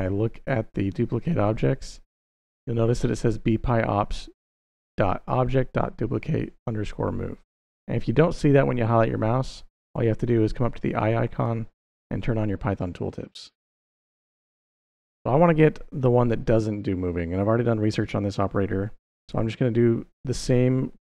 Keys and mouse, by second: 11.1 click, 11.6 click, 19.1-21.0 typing.